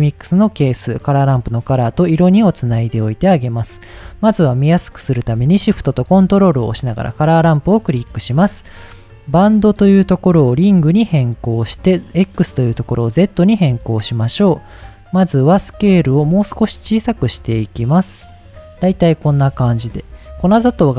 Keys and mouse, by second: 0.3-1.9 drag, 2.7 middle click, 3.9 middle click, 6.9 middle click, 8.0 middle click, 9.7-10.6 drag, 11.9-12.9 drag, 16.4-18.5 shift+drag, 20.1 shift+middle click.